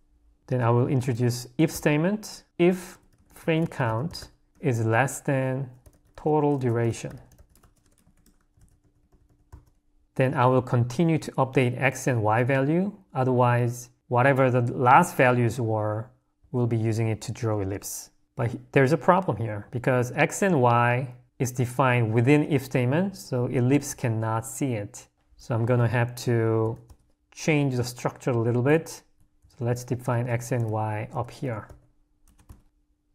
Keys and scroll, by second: 8.5 j, 10.0 Escape, 11.1 l, 25.1 u, 25.6 d, 26.6 d, 30.1 0, 32.5 Escape.